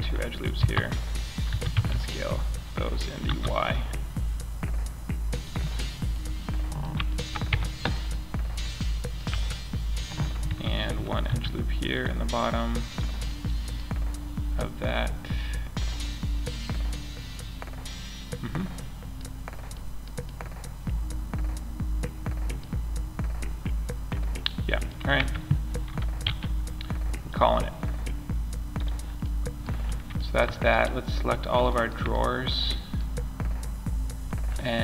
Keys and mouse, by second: 0.8 s, 4.9 click, 5.7 middle click, 5.9 middle click, 6.8 Tab, 8.6 Tab, 10.6 ctrl+r, 18.1 middle click, 18.3 middle click, 18.7-19.2 middle drag, 19.8-23.8 middle drag, 24.5 Tab, 25.6 m, 34.6-34.8 drag.